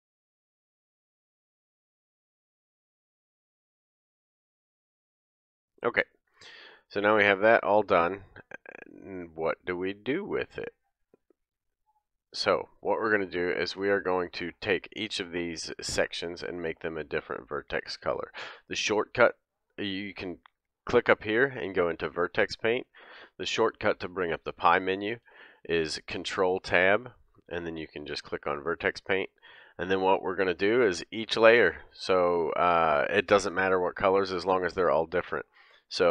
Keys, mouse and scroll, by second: 0.0-1.4 typing, 0.2 ctrl+alt+shift+c, 0.3 ctrl+alt+shift+c, 0.9 click, 1.6 Tab, 2.1 shift+click, 2.4 ctrl+j, 2.5 Tab, 2.6 Tab, 2.6-5.0 middle drag, 2.9 Tab, 3.0 click, 3.4-5.3 typing, 4.6 scroll down 1, 4.9 scroll up 1, 5.0 click, 5.1-6.9 middle drag, 5.4 scroll down 1, 6.1 Tab, 6.9-9.5 drag, 7.1 Tab, 8.2 middle click, 9.5 middle click, 10.0 click, 10.1 middle click, 10.6 click, 10.7-11.1 middle drag, 11.1 click, 11.2-16.2 middle drag, 16.2 click, 16.4-16.7 middle drag, 16.7 click, 17.3 middle click, 20.8-33.3 drag, 25.3 ctrl+Tab, 29.3 middle click, 33.3-36.1 middle drag.